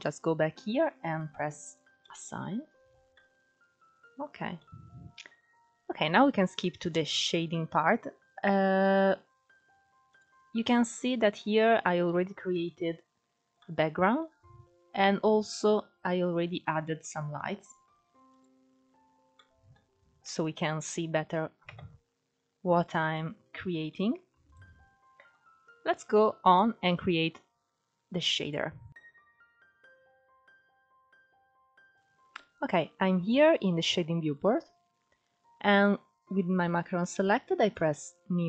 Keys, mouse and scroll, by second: 1.3 click, 2.0 Tab, 2.4-2.8 scroll down 4, 2.8-4.3 middle drag, 4.3-4.6 scroll up 2, 4.6-8.5 middle drag, 8.5 click, 9.1-9.8 scroll down 4, 9.8 click, 10.5 click, 11.3-12.5 middle drag, 12.5-13.3 scroll down 8, 13.3-15.1 middle drag, 15.1 click, 15.8-16.7 scroll up 8, 16.7-18.0 middle drag, 18.0 click, 18.6-19.1 scroll up 6, 19.1 middle click, 19.8 scroll down 3, 20.0-20.7 middle drag, 20.7-21.3 scroll up 3, 21.3 KP_0, 22.0-22.7 scroll up 12, 22.9-24.2 shift+middle drag, 24.2 click, 24.8-25.8 scroll down 3, 25.8-26.2 scroll up 2, 26.3-28.0 shift+middle drag, 28.0 click, 29.1 KP_0, 29.8 scroll up 1, 30.0-31.0 middle drag, 31.0 click, 34.9-35.4 scroll up 2, 35.4-37.4 middle drag, 37.4-38.4 drag.